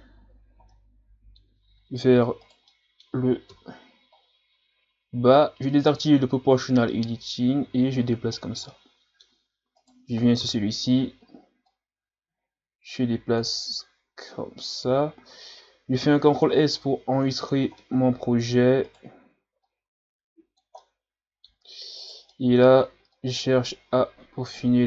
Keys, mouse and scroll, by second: 0.7-1.7 middle drag, 1.7-2.1 scroll down 2, 2.4 right click, 2.7 middle click, 3.5 KP_3, 4.2-4.7 scroll up 1, 5.8 click, 7.0-8.7 drag, 8.7-9.8 middle drag, 9.8 right click, 10.4 KP_3, 11.7-14.6 drag, 14.6 ctrl+z, 16.0 ctrl+s, 17.8-18.9 middle drag, 18.9 right click, 19.7-20.8 drag, 20.8-22.0 middle drag, 22.0 right click, 22.3 middle click, 23.1-24.8 drag.